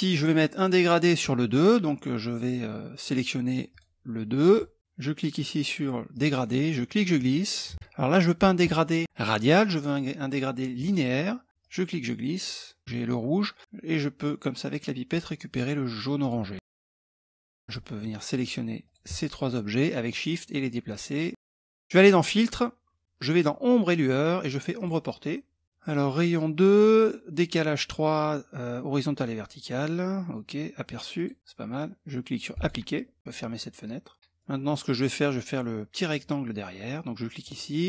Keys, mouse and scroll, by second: 3.3 click, 4.1 click, 5.7 click, 6.7-7.8 drag, 10.3 click, 11.5-12.8 drag, 15.8 click, 17.0 click, 17.1 middle click, 17.5 click, 17.8 shift+click, 19.6-21.3 drag, 21.6 click, 24.3 click, 25.4 click, 30.7 click, 32.1 click, 34.1 middle click, 37.0 click.